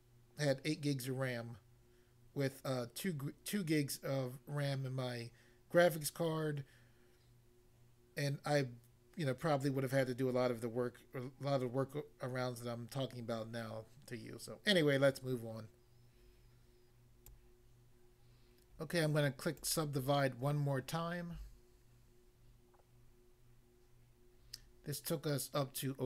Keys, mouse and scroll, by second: 17.2 click, 17.3 click, 19.6 click, 19.7 click.